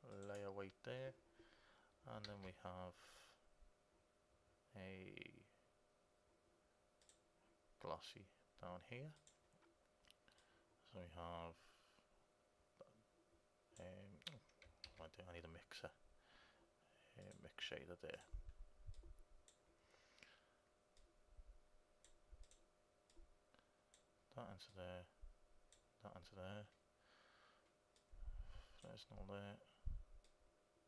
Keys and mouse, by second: 2.4 shift+a, 10.5-13.9 drag, 15.0 shift+a, 19.1-20.8 drag, 21.2-27.1 drag, 28.2-30.1 drag, 30.4-30.8 drag.